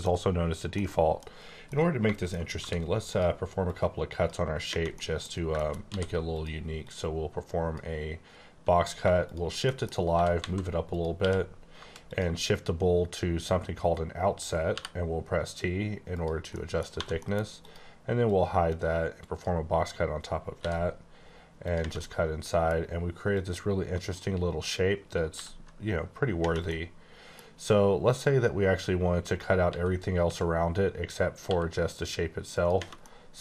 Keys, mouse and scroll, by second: 0.7 middle click, 1.6 middle click, 2.4 scroll up 1, 2.6 d, 3.1 click, 3.6 click, 4.9 middle click, 5.3 scroll down 1, 5.6 shift+middle click, 5.9 d, 6.3 click, 6.8 click, 9.6 middle click, 9.9 scroll up 1, 10.1 g, 10.4 z, 10.9 click, 11.1 q, 12.1 click, 12.5-12.9 scroll down 2, 13.2-14.7 scroll down 3, 14.7 t, 16.1 click, 16.5 middle click, 17.1 middle click, 17.5 click, 18.2 click, 20.6 b, 21.6 click, 22.0 middle click, 23.3 click, 25.3 b, 26.7 middle click, 26.8 scroll down 1, 28.1 click, 29.7-30.2 typing, 31.4 e, 32.5 click, 33.0 scroll down 1, 33.2 middle click.